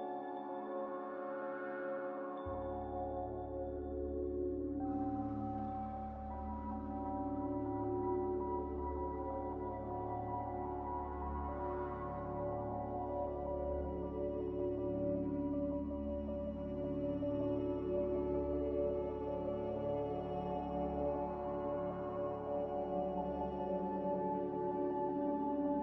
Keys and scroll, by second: 7.3 Delete, 15.0 F9, 15.7 a, 16.4 a, 20.8 ctrl+z, 21.1 ctrl+z, 21.3 ctrl+z, 22.8-23.7 typing, 25.3 typing.